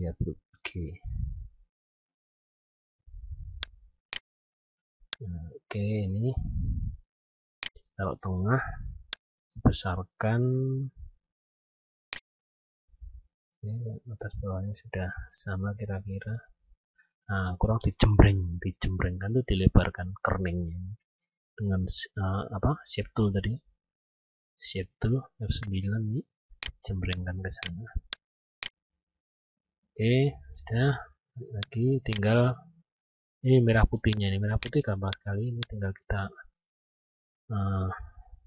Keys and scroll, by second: 21.4 F10, 29.8 F9.